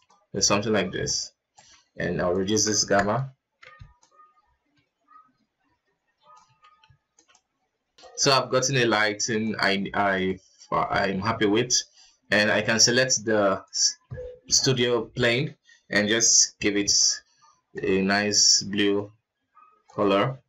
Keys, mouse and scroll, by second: 0.0-0.6 drag, 1.0-7.2 ctrl+alt+drag, 7.2 z, 8.5-9.9 drag, 10.0 z, 11.9 right click, 13.1 click, 14.2 click, 14.6-18.3 drag, 19.2 click, 20.0 click.